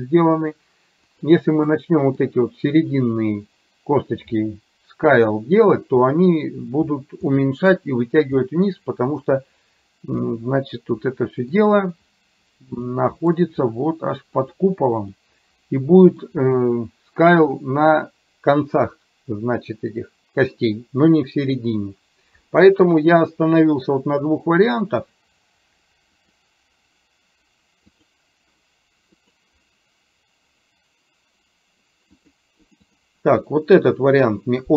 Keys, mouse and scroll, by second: 1.1 click, 1.9 middle click, 7.4-8.9 middle drag, 10.4-11.6 middle drag, 13.0 middle click, 14.4 click, 15.2-20.8 middle drag, 23.6-29.6 drag.